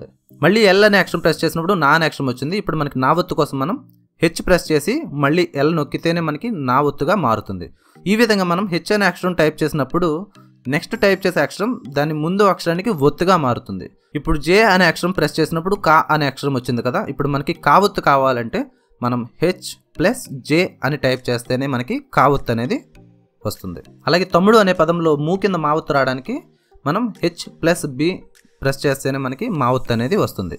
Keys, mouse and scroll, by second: 0.2 l, 2.4 typing, 4.7 h, 6.5 l, 8.8 space, 11.4 typing, 12.9 typing, 14.9 j, 18.2 typing, 21.6 space, 24.8-27.5 typing, 28.9-29.7 typing.